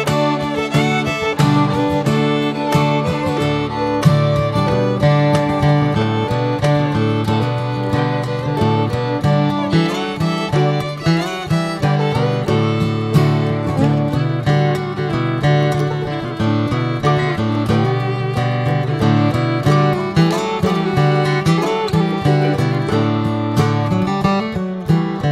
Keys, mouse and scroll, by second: 2.6 s, 8.3 g, 9.9 r, 11.3 middle click, 11.6-12.1 scroll up 3, 11.9-15.5 middle drag, 14.0-15.5 drag, 15.5 KP_0, 18.5 click, 19.2 alt+middle click, 19.4 alt+middle click, 20.4 g, 21.4 alt+middle click, 22.1 d, 23.6 click.